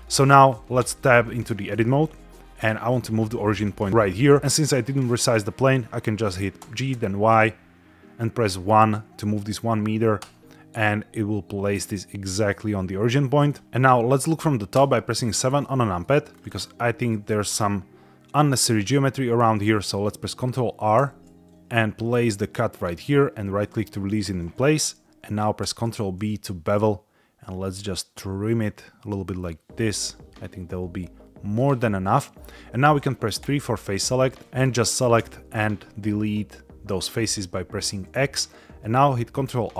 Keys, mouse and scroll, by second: 0.7 Tab, 6.6 g, 6.8 y, 8.4 KP_1, 10.1 KP_Enter, 13.4 click, 14.7 KP_7, 15.6 shift+middle click, 16.2 scroll up 2, 16.7 shift+middle click, 20.9 ctrl+r, 22.6 click, 23.5 right click, 25.5 ctrl+b, 31.5 click, 33.4 3, 34.2 click, 34.5 shift+click, 35.0 x, 39.3 ctrl+r.